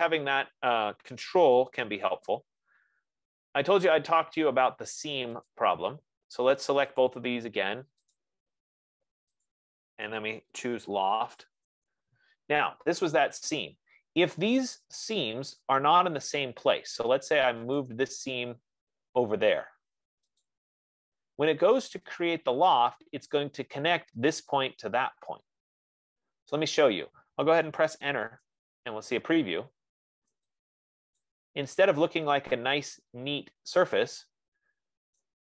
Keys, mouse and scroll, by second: 2.3 ctrl+z, 3.1 ctrl+z, 6.0 click, 7.5 click, 8.8 shift+click, 9.8 click, 10.8-12.4 typing, 18.5 click, 20.7 click, 28.9 Return, 31.6 click.